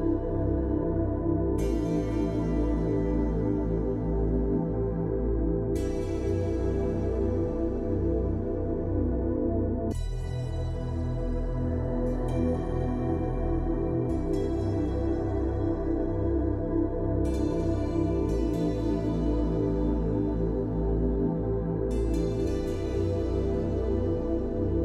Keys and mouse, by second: 0.4 click, 0.4-3.0 typing, 1.0 click, 2.0 click, 3.9 middle click, 4.8-5.6 ], 5.7 ctrl+z, 6.2-7.8 drag, 8.1 click, 8.6 click, 9.8 ctrl+z, 10.2-11.2 typing, 10.5 click, 11.3 click, 12.4 ctrl+z, 12.5 ctrl+z, 14.2 click, 14.7 ctrl+z, 14.9 click, 15.6 middle click, 17.2 click, 17.3 middle click, 18.4 middle click, 19.2 click, 20.3-20.8 [, 20.8 click, 21.3 ], 21.4 ], 21.7 ], 21.8 ctrl+z, 22.1 click, 22.5 click, 23.1-23.9 ], 23.9 click, 24.0 ].